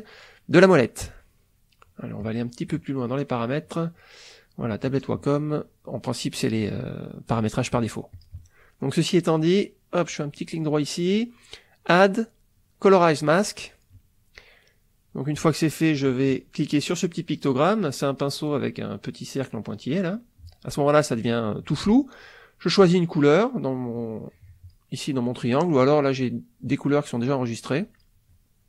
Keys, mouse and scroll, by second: 2.2 click, 4.7 click, 8.1 click, 9.7 right click, 10.3-11.8 right drag, 13.4 click, 19.7 click, 23.9-24.9 drag, 27.9 click.